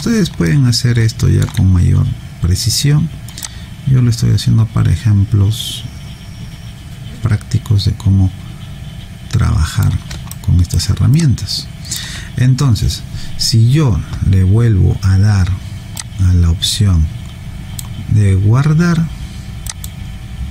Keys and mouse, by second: 0.5 alt+middle click, 3.4 click, 10.3 alt+right click, 11.1 alt+click, 16.0 click.